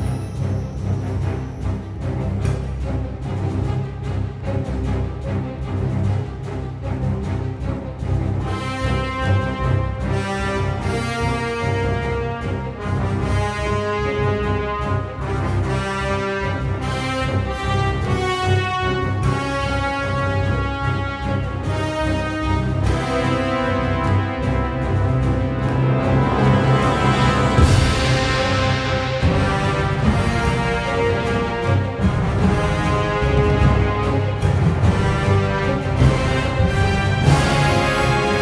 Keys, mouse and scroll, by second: 1.8 ctrl+z, 5.6 ctrl+z, 8.5 ctrl+z, 9.7 click, 12.3 click, 12.4 ctrl+z, 20.0 ctrl+z, 28.5 ctrl+z, 33.5 ctrl+z, 34.7 ctrl+z, 37.4 ctrl+z.